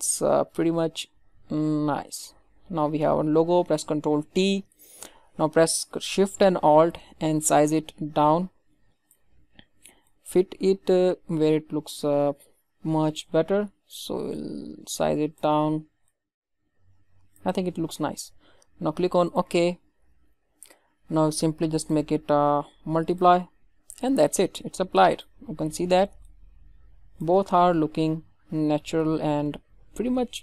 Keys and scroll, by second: 4.1 ctrl+t.